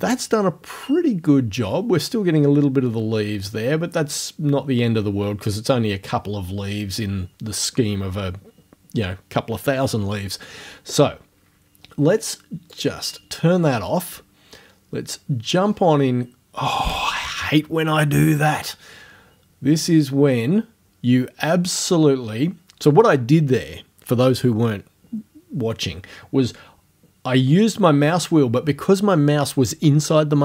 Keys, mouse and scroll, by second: 12.8 click, 15.7-16.0 scroll up 1, 18.9-19.9 scroll down 1, 20.0 scroll down 1.